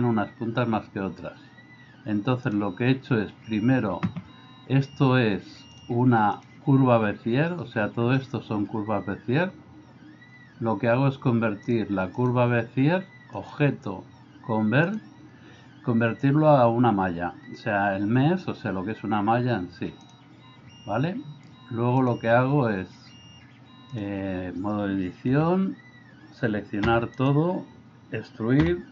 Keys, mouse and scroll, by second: 2.5 click, 5.8-7.0 drag, 11.7 click, 13.4-20.3 drag, 22.0-24.1 drag, 25.3 a, 27.0 e.